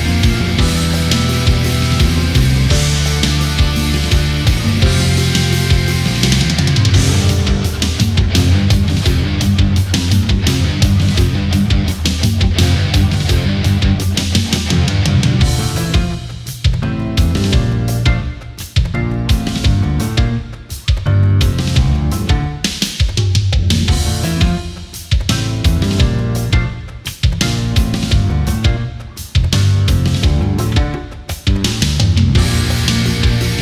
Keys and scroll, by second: 5.3 Right, 5.6 Left, 19.7 Right, 20.9 space, 28.5 space.